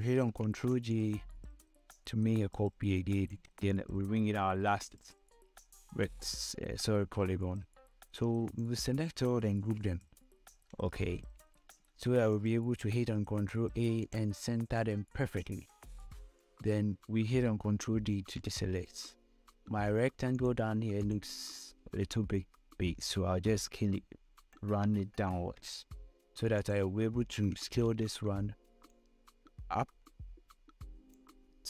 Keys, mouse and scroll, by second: 1.1 ctrl+j, 1.6-5.7 shift+drag, 5.7 scroll down 1, 9.2 ctrl+shift+click, 9.9 ctrl+g, 11.6 scroll down 1, 12.3 scroll up 1, 13.9 ctrl+a, 14.7 click, 18.7 ctrl+d, 19.4 scroll down 2, 20.1 scroll up 1, 21.0 click, 24.1-25.2 shift+drag, 28.5 ctrl+t, 29.9 click.